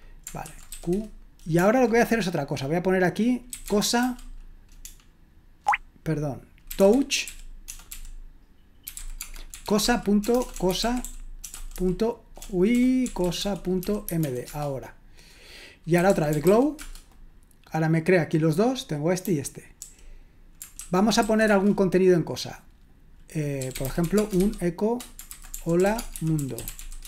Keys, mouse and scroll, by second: 0.5-1.2 typing, 3.4-16.9 typing, 19.2-21.5 typing, 23.4-27.0 typing.